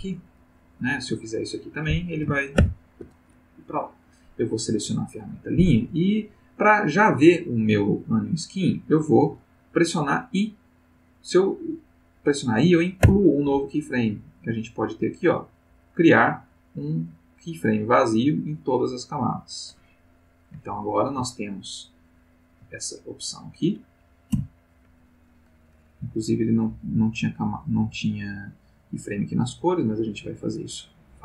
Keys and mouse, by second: 0.4 click, 0.8 click, 2.6 ctrl+z, 4.7 click, 13.0 i, 19.0 click, 21.5-22.6 ctrl+middle drag, 23.3 click, 24.3 i, 26.3 click, 27.8 click, 29.4 click, 30.0 click.